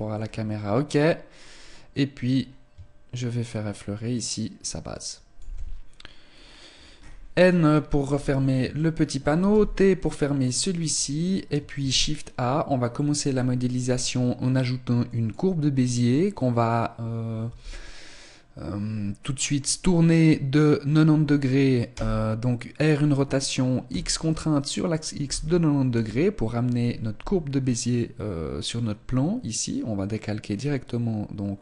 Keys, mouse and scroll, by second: 0.0-1.7 scroll up 5, 1.7 click, 1.7-2.1 scroll up 1, 6.4-8.3 scroll up 13, 7.9 n, 8.9 shift+middle click, 9.5-10.1 scroll down 3, 9.5 t, 10.1 shift+middle click, 11.9 shift+a, 21.9 r.